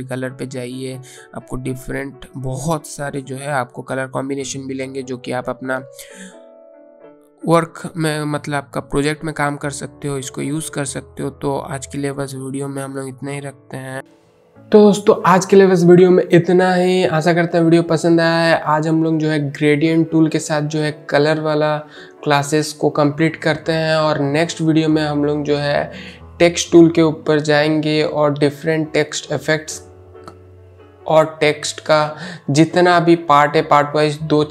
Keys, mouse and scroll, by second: 7.1-7.7 scroll down 1, 8.0-8.7 scroll down 1, 10.4 click, 12.0 click.